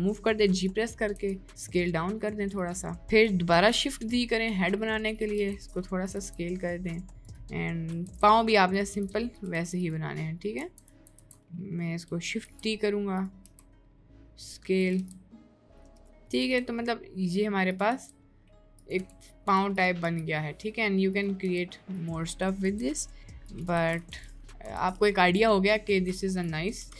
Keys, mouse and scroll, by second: 3.6 shift+d, 8.1 shift+d, 9.1 shift+d, 9.7 shift+d, 10.6 ctrl+z, 10.9 ctrl+z, 11.1 ctrl+z, 12.5 shift+d, 15.1 shift+d, 16.1 shift+d, 16.6 shift+d, 17.9 shift+d, 19.0 Tab, 22.8 shift+d, 23.9 ctrl+z, 24.3 b, 24.7 b, 26.8 Delete.